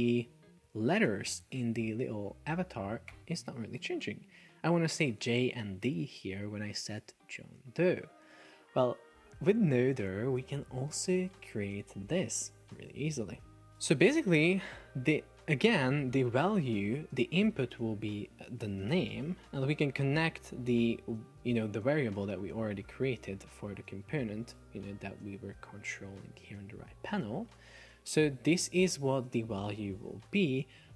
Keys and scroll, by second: 1.2 shift+super+4, 3.2 Escape, 18.7 shift+n, 19.2 Return.